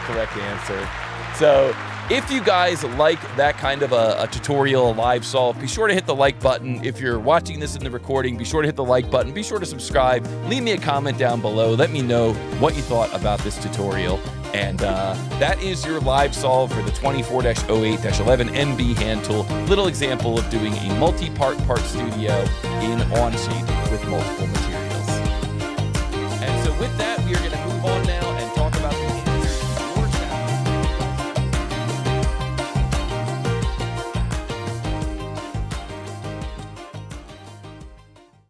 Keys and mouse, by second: 3.0 click.